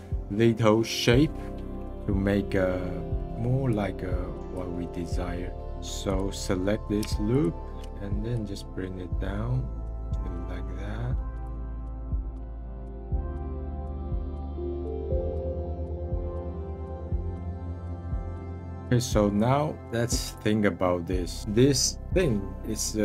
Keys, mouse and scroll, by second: 2.4-3.7 middle drag, 3.7-4.7 drag, 4.7-5.7 middle drag, 6.0-11.3 drag, 11.9-12.4 scroll down 19, 12.0 middle click, 12.1 middle click, 12.4 click, 12.7 a, 13.1 middle click, 13.4 click, 13.7 scroll up 5, 13.8 scroll down 2, 13.9 s, 14.5 middle click, 15.1 g, 15.3 ctrl+z, 15.5 g, 15.6 middle click, 15.7 scroll up 5, 15.8 middle click, 15.9 click, 16.0 middle click, 16.1 click, 16.3 alt+shift+click, 17.2 middle click, 17.4 alt+shift+click, 17.5 middle click, 17.6 ctrl+z, 17.8 middle click, 18.0 click, 18.2 middle click, 18.4 alt+shift+click, 18.7 scroll down 9, 19.1-20.8 middle drag, 20.8-21.4 scroll up 4, 21.4-23.0 middle drag.